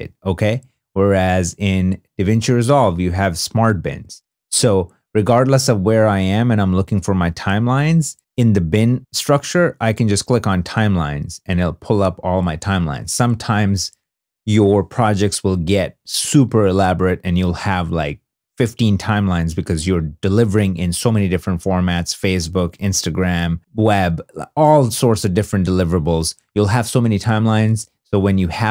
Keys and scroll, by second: 0.8 super+Tab.